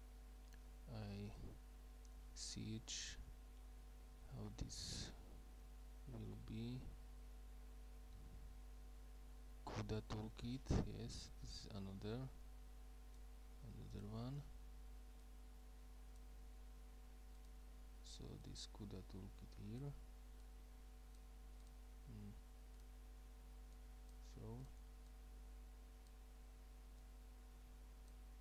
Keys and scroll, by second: 0.0-0.5 typing, 2.2-5.3 typing, 6.5 typing.